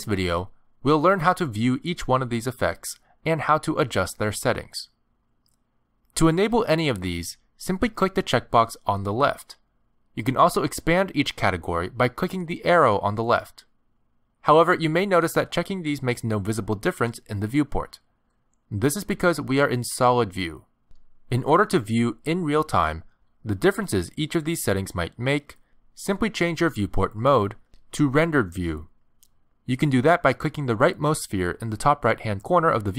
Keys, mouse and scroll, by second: 9.5 click, 12.1 click, 31.3 click.